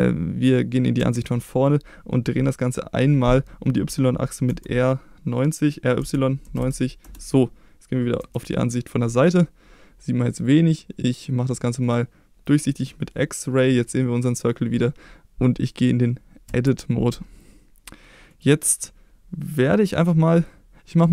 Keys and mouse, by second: 1.0 KP_1, 4.5 r, 6.0 y, 6.4 9, 6.5 0, 7.0 Return, 8.2 KP_3, 11.8 click, 16.5 Tab, 18.3 click.